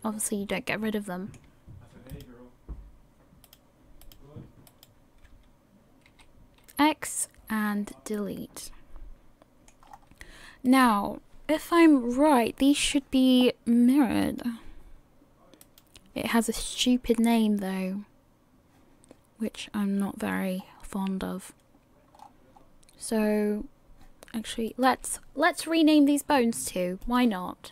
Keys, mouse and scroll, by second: 0.5 middle click, 2.3 shift+right click, 3.6 shift+right click, 6.1 x, 7.9 middle click, 9.9 scroll up 1, 10.9 right click, 10.9-11.3 scroll up 3, 11.3 KP_1, 12.9-14.2 scroll up 1, 14.2 click, 15.9 right click, 20.6-21.2 scroll down 7, 22.1-24.2 scroll up 5, 24.9 right click, 27.0 click.